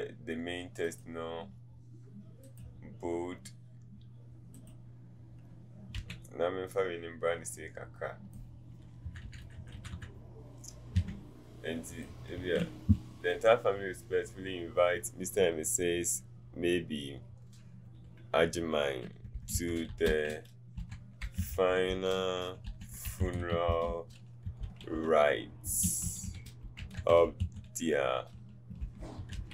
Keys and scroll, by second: 6.1 v, 9.1 Down, 10.9 t, 19.4-24.4 typing, 25.6 t, 25.6 i, 27.2 typing, 28.8 i.